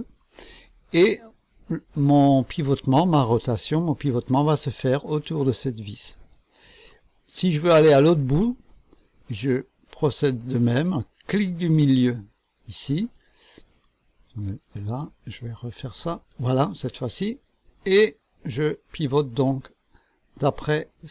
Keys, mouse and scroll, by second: 0.5-7.1 drag, 7.3-8.3 right drag, 11.4 middle click, 13.1 click, 14.2 right click, 16.0 middle click, 16.7-21.1 drag.